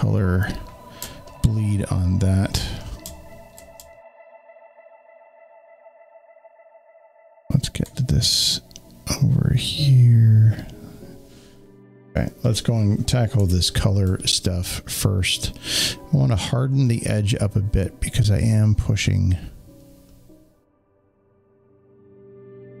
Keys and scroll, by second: 13.3 w.